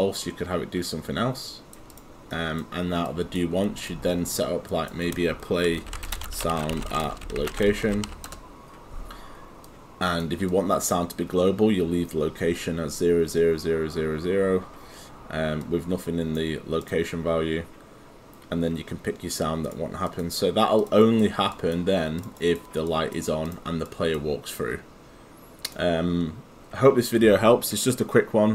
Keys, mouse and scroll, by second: 2.3 right click, 3.1 click, 5.4-8.6 typing, 9.7 click, 15.7 click, 21.0 right click, 21.5 click, 22.4 right click, 22.9 click.